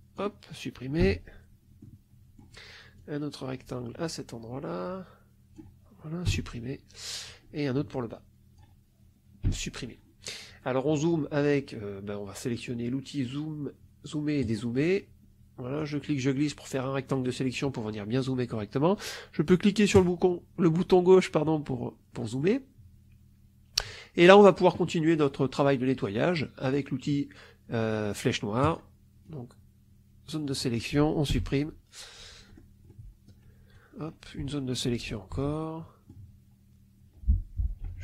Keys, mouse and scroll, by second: 0.9 Delete, 1.7-2.5 scroll up 1, 2.8-5.6 drag, 6.2 Delete, 7.1-8.7 drag, 9.4 Delete, 14.3 click, 15.7-17.3 drag, 19.8 click, 21.7 middle click, 28.5 click, 29.1-30.5 drag, 31.2 Delete, 32.4 middle click, 32.8 middle click, 33.6-35.1 drag, 35.2 Delete, 35.5 click, 35.8 middle click, 37.7 Delete.